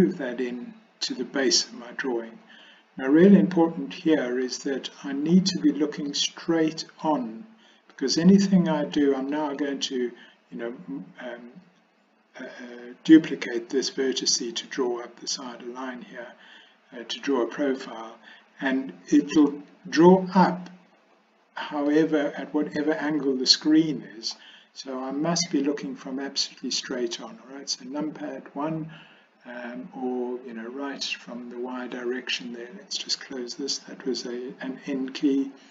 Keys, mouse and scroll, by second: 6.1 middle click, 8.0 middle click, 9.4 middle click, 17.8-19.5 middle drag, 21.9-24.3 middle drag, 26.0 KP_1, 34.9 n.